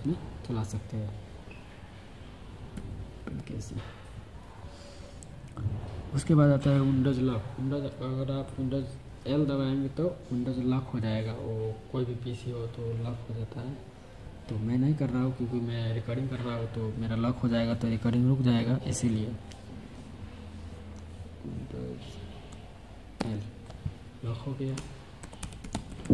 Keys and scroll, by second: 2.6 super+k, 23.0 super+l.